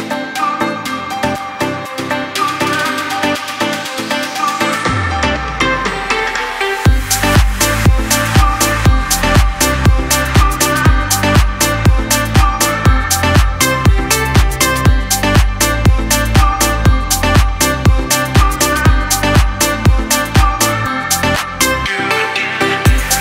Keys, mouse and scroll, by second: 0.6-2.1 drag, 5.2 click, 7.9 click, 12.6 e, 14.3-14.9 typing, 16.7 click, 17.9 space, 17.9 click, 18.4 space, 19.0 click.